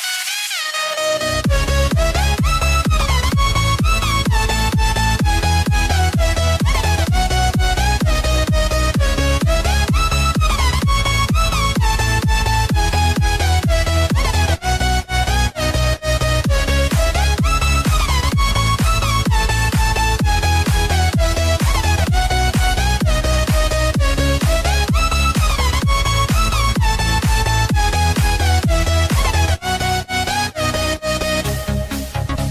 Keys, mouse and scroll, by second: 4.7 scroll up 1, 5.9 click, 6.8 space, 7.1 click, 7.4 space, 8.3 click, 13.7 Return, 14.1-14.5 scroll up 1, 14.8 space, 16.1 click, 17.8 scroll up 1, 17.9 space, 18.2 click, 18.4 space, 19.3 p, 19.9-21.3 scroll up 1, 21.3 click, 29.8 space, 29.9 click, 30.3 space, 30.8 click, 31.1 space.